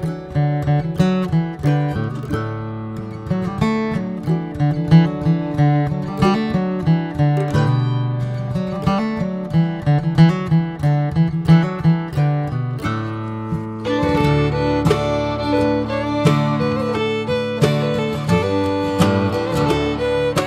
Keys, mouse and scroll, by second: 4.6-5.1 drag, 6.5-14.1 middle drag, 14.1 scroll down 1, 14.3-17.4 middle drag, 17.4 scroll up 1, 17.6-20.0 shift+middle drag.